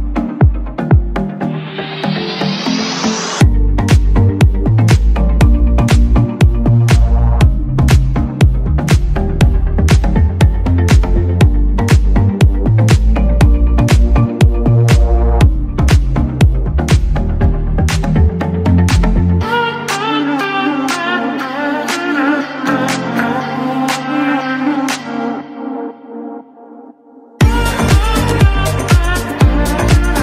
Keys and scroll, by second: 7.2 Escape, 9.0 ctrl+x, 18.1 Escape.